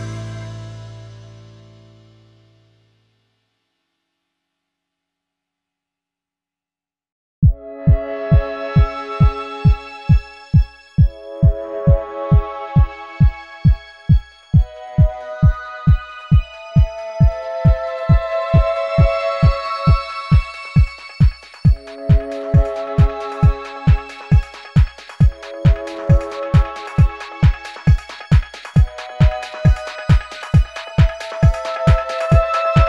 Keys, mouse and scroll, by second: 0.8 space, 1.7-2.3 alt+scroll up 1, 2.3 space, 5.9 alt+scroll up 1, 6.1 space, 6.7 alt+scroll up 1, 8.0 space.